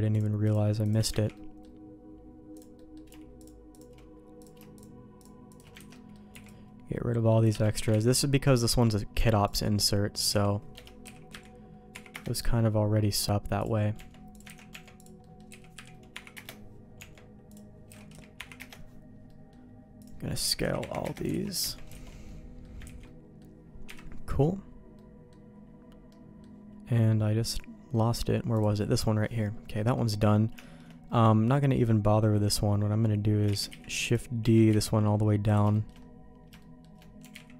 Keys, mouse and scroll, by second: 0.1 shift+click, 1.2 ctrl+x, 1.3 middle click, 2.5 click, 2.7 middle click, 3.3 shift+click, 4.3 click, 4.7 shift+click, 5.4 shift+click, 5.8 ctrl+x, 5.9 middle click, 6.3 c, 8.0 ctrl+x, 8.1 middle click, 9.1 Tab, 9.4 click, 9.8 middle click, 10.3 s, 11.0 s, 12.9 middle click, 13.6 click, 14.0 Tab, 14.3 click, 14.5 ctrl+x, 14.7 Tab, 15.0 click, 15.2 middle click, 15.5 s, 17.0 Tab, 17.5 click, 17.9 s, 19.3 middle click, 20.0 click, 20.4 s, 21.4 alt+a, 21.6 Tab, 21.9 alt+a, 22.3 middle click, 22.9 ctrl+s, 23.0 middle click, 23.9 KP_Divide, 25.0 middle click, 26.1 middle click, 28.6 click, 29.2 middle click, 29.5 middle click, 30.6 shift+middle click, 33.5 shift+d, 34.4 g, 35.7 shift+middle click, 36.6 middle click, 37.2 g.